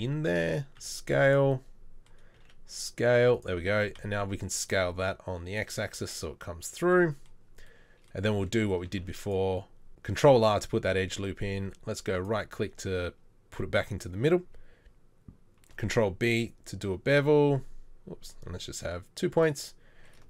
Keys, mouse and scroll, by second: 0.8 s, 2.4 s, 3.8 s, 8.9 ctrl+r, 15.7 ctrl+b.